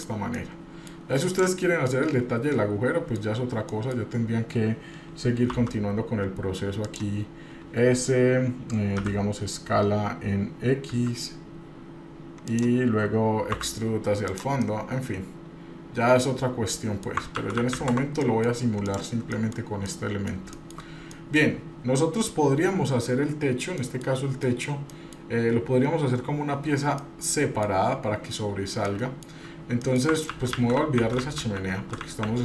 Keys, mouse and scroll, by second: 0.4 middle click, 1.3 click, 1.9-3.2 middle drag, 3.3 scroll up 1, 3.7 middle click, 9.0 s, 13.5 e, 14.6-17.1 middle drag, 17.4 ctrl+z, 17.6 ctrl+z, 18.0 ctrl+z, 18.2 middle click, 18.5 scroll down 1, 18.8 click, 19.3 middle click, 19.6-19.9 scroll down 1, 19.9 middle click, 20.6 shift+middle click, 21.1 middle click, 21.6-22.6 scroll up 1, 23.5 scroll down 1, 23.8 middle click, 24.4 middle click, 24.9 middle click, 27.0 middle click, 28.9 middle click, 29.3 scroll down 1, 29.8 middle click, 30.3 ctrl+z, 30.6 ctrl+z, 30.8 ctrl+z, 31.0 ctrl+z, 31.1 ctrl+z, 31.3 ctrl+z, 31.6 ctrl+z, 31.9 ctrl+z, 32.1 ctrl+z, 32.3 ctrl+z.